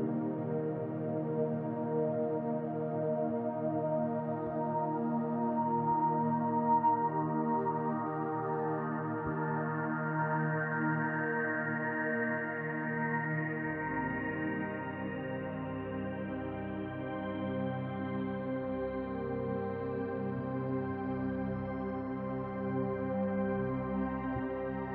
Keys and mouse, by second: 2.0 middle click, 4.2 shift+middle drag, 4.6-5.3 middle drag, 6.6 shift+click, 8.2 ctrl+p, 11.3 click, 12.1 click, 14.9-16.9 drag, 18.0-18.8 drag, 22.1 click.